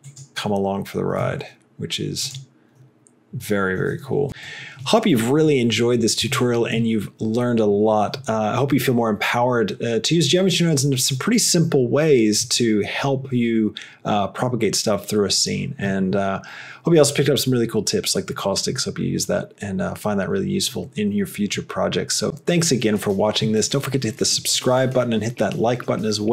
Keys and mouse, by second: 1.3 g.